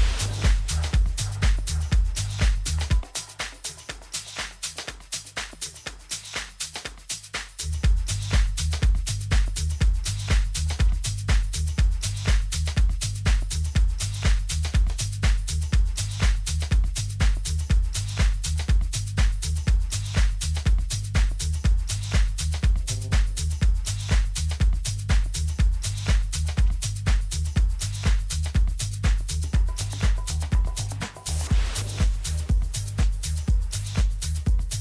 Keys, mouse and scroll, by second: 0.2 a, 1.5 b, 3.8 g, 11.4 a, 12.0-14.4 middle drag, 13.8 Tab, 14.4 z, 18.3 a, 22.0-23.9 drag, 25.2 n, 31.1 KP_3.